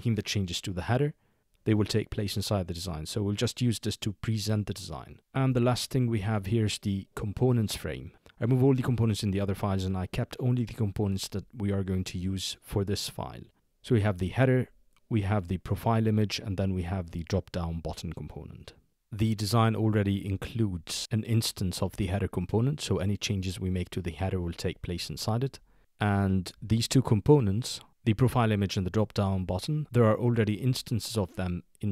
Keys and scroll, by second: 5.4 shift+2.